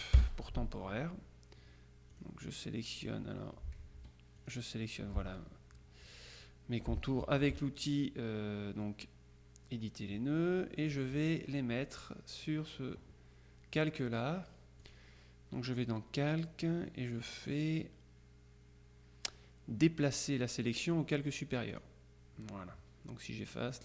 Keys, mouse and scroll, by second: 0.2 Return, 2.2 click, 4.1 F2, 4.5 click, 5.1 F1, 7.3 F2, 11.0 click, 15.0 click, 21.8 click.